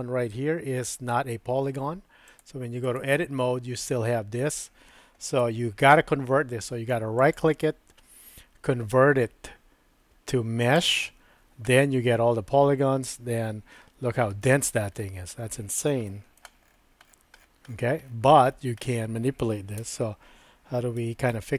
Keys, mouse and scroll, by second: 2.3 click, 5.4 Tab, 7.2-10.8 right drag, 11.5 Tab, 16.1 shift+middle click, 19.9 Tab, 21.1 super+z, 21.3 super+z.